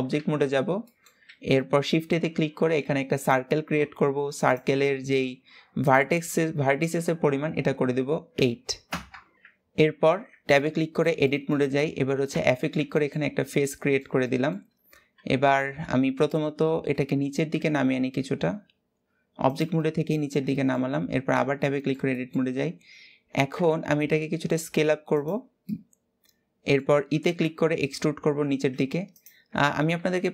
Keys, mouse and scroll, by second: 0.6-0.9 middle drag, 0.9 shift+a, 4.1-8.6 drag, 9.8 Tab, 10.3-11.3 middle drag, 11.3-12.0 scroll up 3, 12.0 f, 12.3-12.6 scroll down 2, 12.6-15.1 shift+middle drag, 15.1 Tab, 15.9 g, 19.5-21.0 middle drag, 21.0 Tab, 21.3 middle click, 22.2-23.2 scroll up 1, 23.2 s, 25.3-26.7 middle drag, 26.7 e.